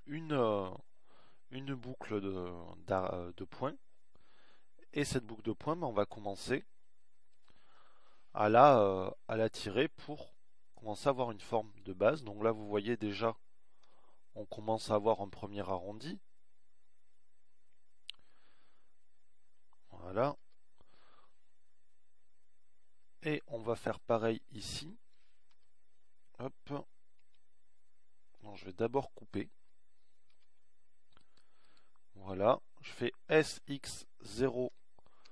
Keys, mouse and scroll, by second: 9.8 KP_1, 15.2 z, 19.9 z, 20.9 z, 21.9 KP_1, 27.1 KP_1, 28.7 KP_3, 29.5 KP_1, 31.9 ctrl+r, 34.9 s.